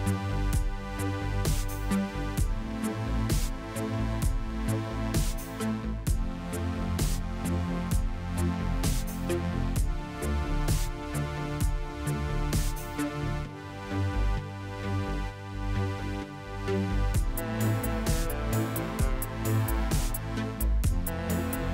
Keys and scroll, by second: 0.0 n, 10.2 Tab, 11.2 KP_Divide, 12.1 Tab, 21.6 s.